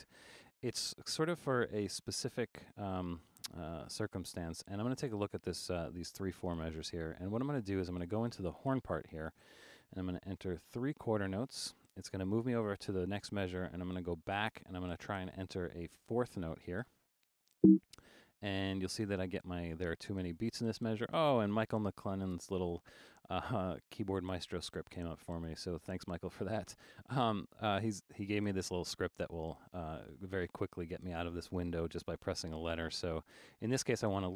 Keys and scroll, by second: 0.1 super+z, 10.0 5, 13.4 typing, 14.0 Left, 17.5 5.